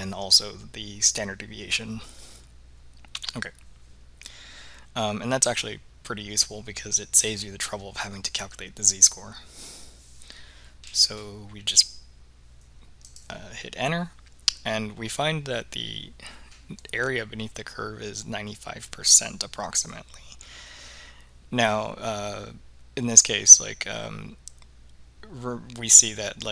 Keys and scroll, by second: 13.2 Return.